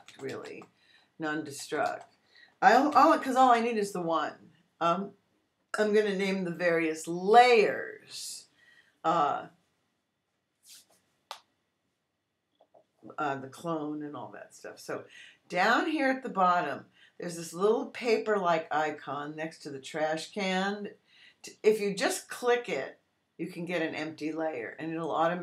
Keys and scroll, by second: 0.0-3.2 typing, 3.4 Return.